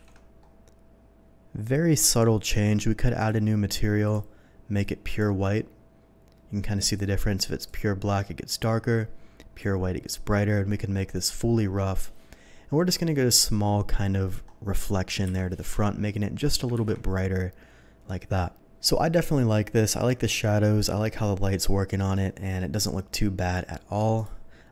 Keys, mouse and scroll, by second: 0.0 ctrl+z, 2.4 click, 3.2 click, 4.0 click, 4.8-5.2 drag, 6.9 click, 7.7-9.6 drag, 11.1 click, 15.3 Delete, 16.7 ctrl+z, 24.2 click.